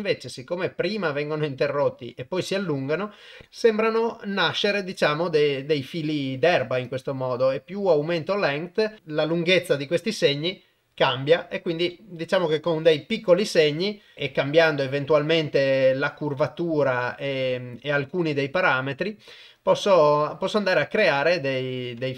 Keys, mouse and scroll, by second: 0.1-0.9 drag, 6.8-9.8 drag, 11.9 shift+middle click, 12.0 shift+click, 16.4-17.9 drag, 20.0 click, 21.3 click, 21.8 click.